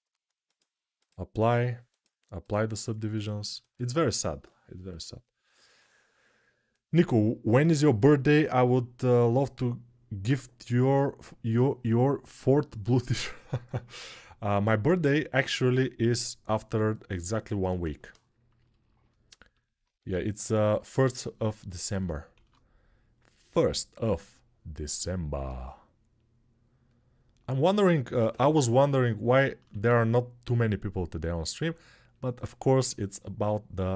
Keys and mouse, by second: 0.3-23.4 drag, 19.7 Tab, 20.6 a, 22.1 shift+d, 23.4 middle click, 24.2-27.2 drag, 27.2-31.9 middle drag, 28.0 l, 29.4 shift+d, 31.9-33.9 drag.